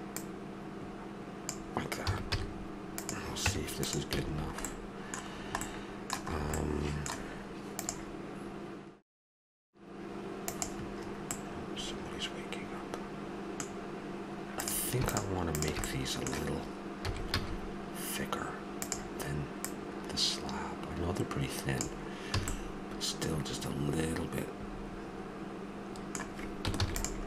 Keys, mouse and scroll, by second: 0.2-1.7 drag, 2.0 a, 2.3 z, 3.5 Tab, 4.1 a, 6.7-7.7 middle drag, 11.3-13.1 middle drag, 14.5-15.8 right drag, 15.8-17.0 middle drag, 17.0 s, 17.3 right click, 19.6 click, 22.3 a, 22.5-24.5 middle drag, 26.8 ctrl+s.